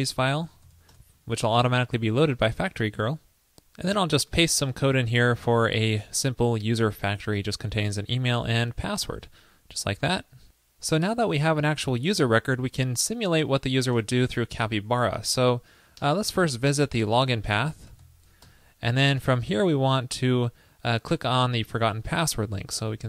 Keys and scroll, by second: 4.8 super+v, 9.3 super+s, 14.0 super+Return, 18.4 super+Return.